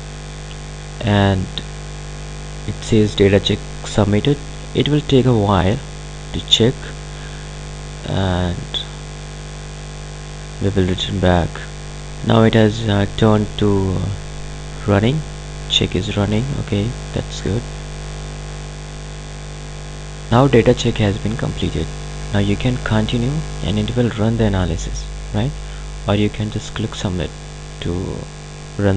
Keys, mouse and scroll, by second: 2.3-5.4 drag, 8.8 click, 12.0 click, 20.0 click.